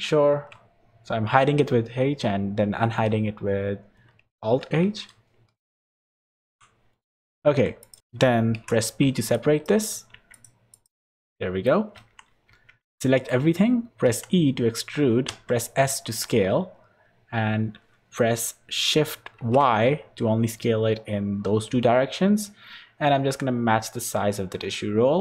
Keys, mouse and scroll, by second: 0.3 alt+h, 1.7 h, 4.6 h, 6.0 middle click, 6.4 2, 6.9 scroll up 3, 7.4 Tab, 7.8 click, 8.0 Tab, 8.0 click, 8.5 p, 10.1 Tab, 10.3 click, 10.7 click, 11.3 middle click, 11.9 Tab, 12.5 a, 12.9 shift+middle click, 14.0 e.